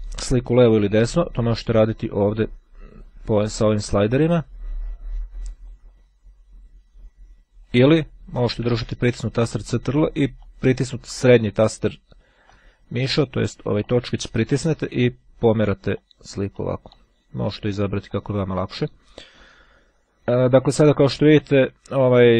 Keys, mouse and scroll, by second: 1.4-4.2 drag, 5.7-8.2 drag, 9.3-10.9 ctrl+middle drag, 11.9-13.0 drag, 13.3-14.3 drag, 14.5-15.5 drag, 16.6 click, 17.8 click, 19.4-20.1 scroll down 1.